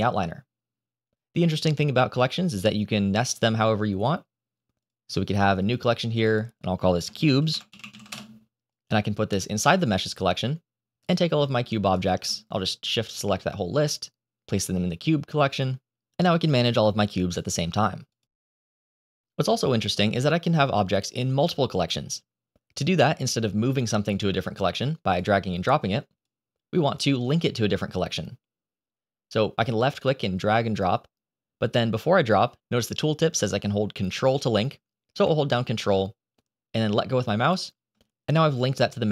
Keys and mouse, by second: 4.7 click, 6.2-8.0 drag, 8.6 click, 10.9 click, 11.8 shift+click, 13.2 click, 13.4 click, 16.0 click, 17.6 click, 18.5 click, 18.8 click, 23.6 click, 29.7 click.